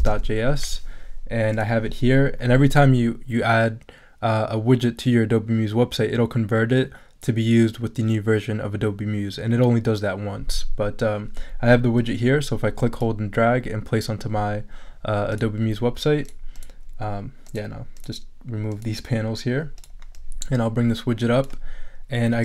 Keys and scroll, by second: 0.0-0.6 typing.